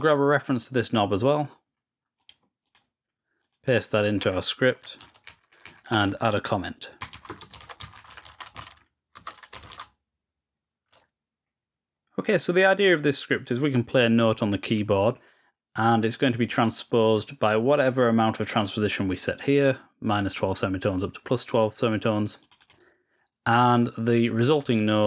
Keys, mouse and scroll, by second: 0.3 right click, 2.1 click, 2.6 click, 3.3 click, 11.1-12.1 ctrl+scroll down 3, 16.5-23.5 drag.